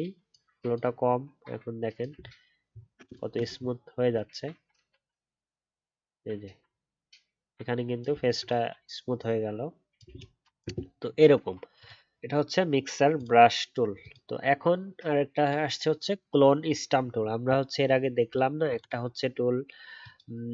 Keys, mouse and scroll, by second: 2.1 alt+scroll down 1, 3.5-4.0 alt+scroll up 4, 10.1 alt+scroll down 1.